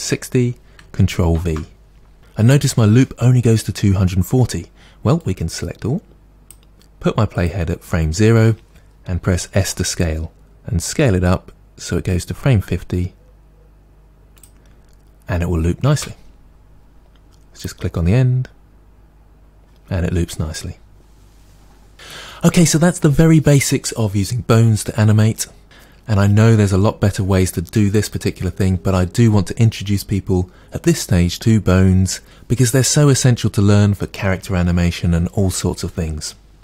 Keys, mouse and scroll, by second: 1.4 ctrl+v, 7.4 click, 9.6 s, 14.4 click, 16.0 space, 17.7 click.